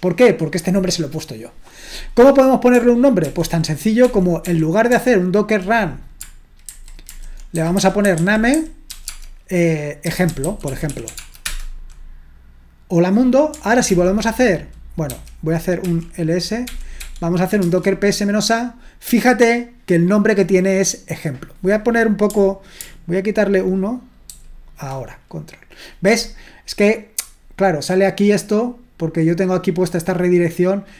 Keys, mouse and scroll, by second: 3.3 ctrl+p, 4.1 ctrl+p, 4.4 ctrl+p, 4.9 ctrl+p, 6.6 alt+b, 7.1 alt+b, 7.3-11.4 typing, 13.9 ctrl+p, 15.1 ctrl+c, 15.8 ctrl+l, 16.7 ctrl+p, 17.0 ctrl+p, 17.6 Return, 19.9-24.3 drag, 24.3 ctrl+alt+-, 30.3-30.9 drag.